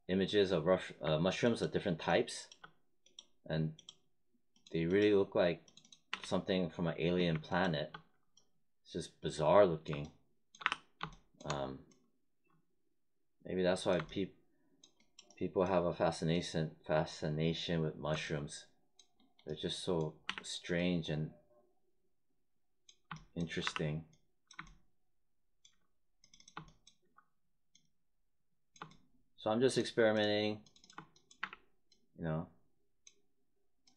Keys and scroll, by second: 6.1 w, 10.6 r, 20.2 w, 23.6 r, 31.3 w.